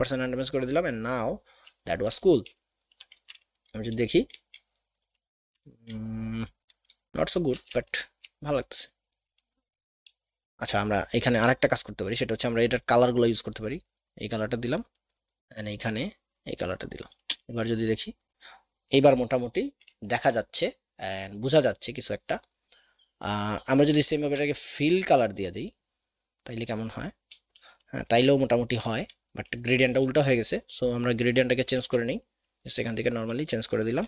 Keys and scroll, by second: 17.4 v, 24.1 shift+x, 31.9 x.